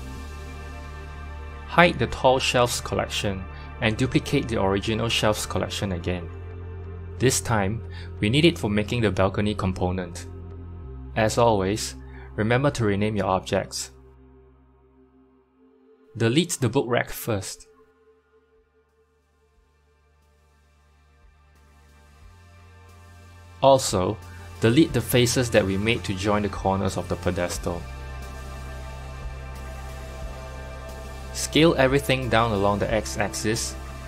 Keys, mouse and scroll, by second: 0.1 middle click, 0.1-2.4 drag, 4.1 click, 5.2-6.6 right drag, 6.8-10.1 drag, 11.2 click, 12.0-16.5 drag, 18.5 x, 19.6 click, 20.5 KP_3, 21.6-23.0 shift+middle drag, 23.0 KP_1, 23.4 Tab, 26.6 click, 28.3 x, 29.9-31.3 drag, 30.5-31.3 scroll up 2, 31.3 g.